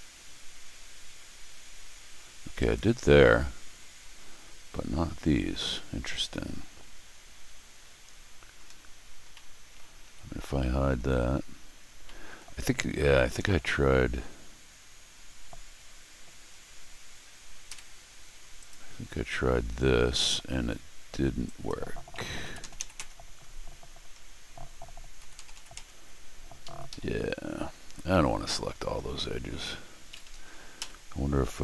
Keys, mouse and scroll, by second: 2.6 click, 4.2 Escape, 9.0-9.3 scroll down 4, 9.3 middle click, 10.0 Tab, 11.8 scroll down 2, 12.0 middle click, 12.7 scroll up 4, 13.4 middle click, 17.7 y, 18.6 click, 21.4 click, 26.6 Escape, 26.9 Escape, 27.6 middle click, 28.0 middle click, 30.1 Escape, 30.2 Escape, 30.8 y.